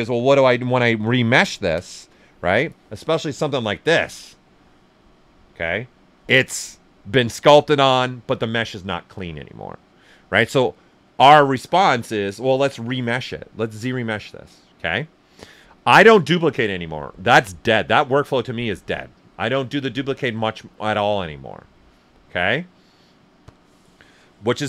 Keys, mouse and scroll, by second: 1.1 shift+f, 1.5 ctrl+right click, 3.5-6.1 alt+right drag, 6.1 shift+f, 12.5 click.